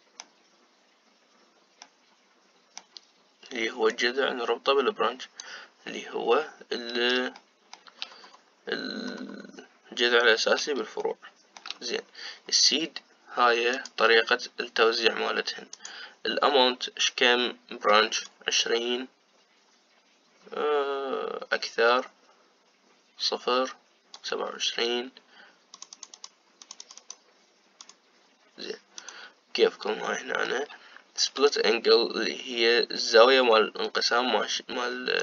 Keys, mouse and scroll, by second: 4.8-7.6 drag, 8.1 shift+middle click, 8.9-9.5 scroll up 3, 10.3-11.7 scroll up 7, 11.7 shift+middle click, 12.6-14.4 scroll up 4, 14.4-29.9 drag, 30.6-32.2 middle drag, 32.2-35.2 shift+drag.